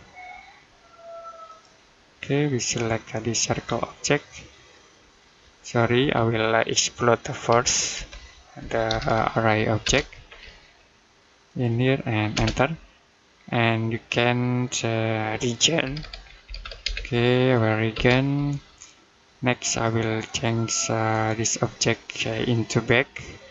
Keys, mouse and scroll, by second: 1.3 click, 3.4-4.9 scroll down 1, 5.8 Escape, 9.7 space, 10.1 scroll up 1, 11.3 click, 12.2 space, 13.3-15.5 scroll down 1, 15.7 r, 17.8 space, 19.5 click, 20.9 right click, 23.4 click.